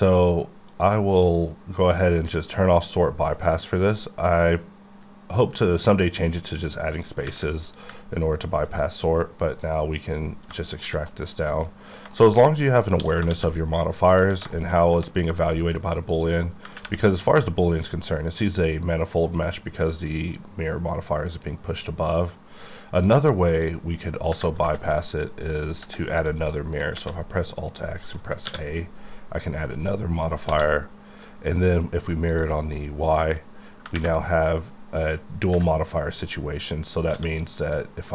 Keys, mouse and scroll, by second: 25.9 middle click, 27.1 alt+x.